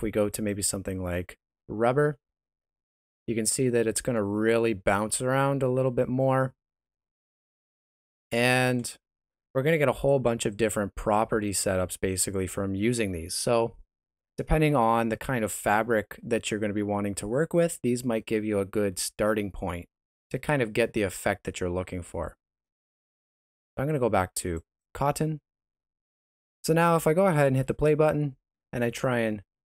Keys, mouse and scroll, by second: 1.9 shift+z, 2.3 space, 3.6 middle click, 3.9 shift+z, 4.3 middle click, 8.5 Escape, 9.9 click, 27.3 space, 28.5 s.